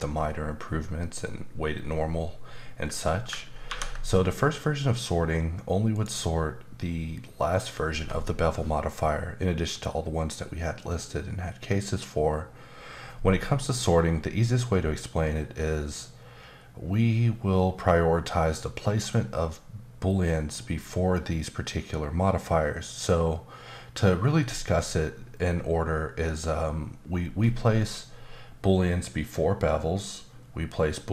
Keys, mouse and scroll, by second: 5.9 click.